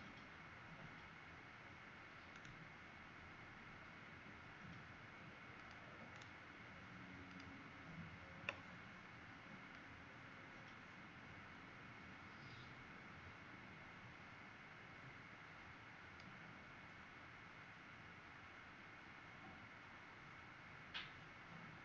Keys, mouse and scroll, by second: 2.3 right click, 5.5 click, 6.1 right click, 7.2 click.